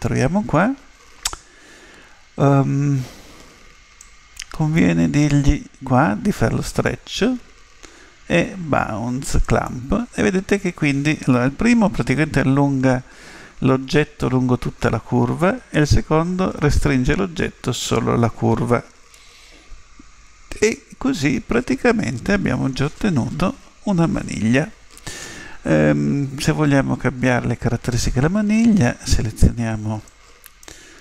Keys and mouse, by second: 3.9-5.7 drag, 6.6 click, 8.4 click, 9.4 click, 19.1-21.5 middle drag, 23.4 KP_7, 30.1 click.